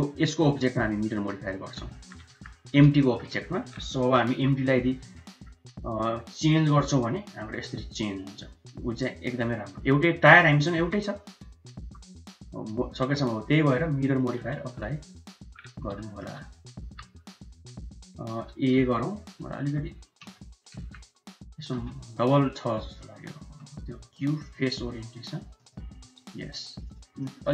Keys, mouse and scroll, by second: 1.4-1.8 middle drag, 1.9 shift+middle click, 2.2 middle click, 3.0 shift+middle click, 3.9 KP_1, 4.3 KP_3, 5.2 shift+drag, 6.5 g, 10.8 g, 16.0 shift+middle click, 16.8 Tab, 17.1 q, 18.8 z, 20.2 Tab, 20.8 a, 21.7 m, 24.0 q, 25.0 q, 26.0 q, 27.2 middle click.